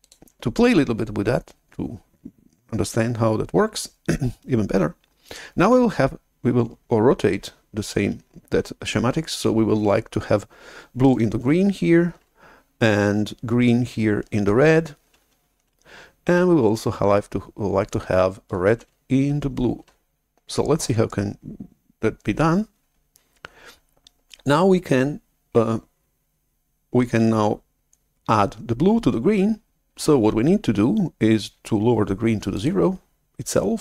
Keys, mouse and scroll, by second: 0.0-2.5 drag, 32.5-33.8 drag.